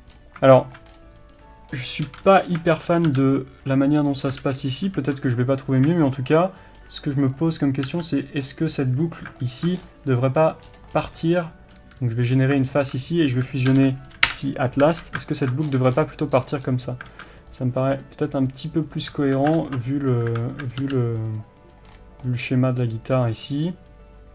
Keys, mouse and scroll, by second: 0.2-0.6 scroll up 2, 1.0-1.8 scroll down 2, 1.8-2.1 scroll up 2, 2.1 3, 2.4 click, 3.8 x, 4.0 click, 4.6 x, 5.0 1, 5.7 click, 6.8-7.3 scroll up 1, 7.3 click, 8.0 f, 9.1 click, 9.8-10.1 scroll down 1, 10.7-11.0 scroll up 1, 11.4 click, 11.9 g, 12.4 click, 14.4 alt+m, 15.0 alt+a, 15.5 ctrl+alt+click, 15.7 scroll down 1, 16.4 scroll up 1, 17.2 alt+a, 17.6 click, 17.9 g, 19.6 ctrl+z, 20.5 alt+shift+click, 21.4 x, 21.9-22.3 scroll down 1, 22.3-24.3 middle drag.